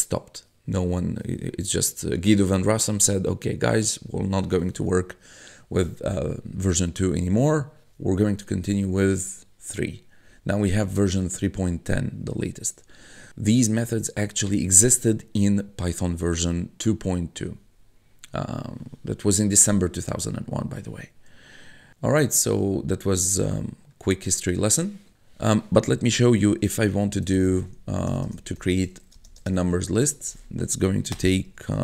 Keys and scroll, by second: 22.6 1, 26.8-30.0 typing, 31.1-31.8 typing.